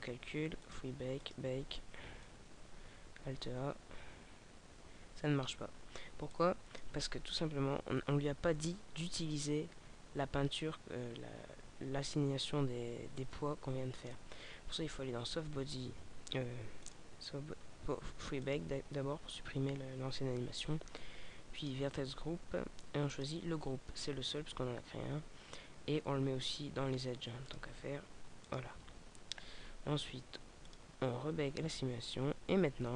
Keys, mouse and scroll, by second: 0.7 click, 1.1 click, 6.3 click, 7.3-7.6 scroll down 2, 14.0 click, 14.5-15.5 scroll down 4, 15.5-15.8 scroll down 3, 16.8 click, 17.6 scroll down 1, 18.4 click, 21.6 click, 24.0-26.0 scroll down 6, 27.3 click, 30.7 click.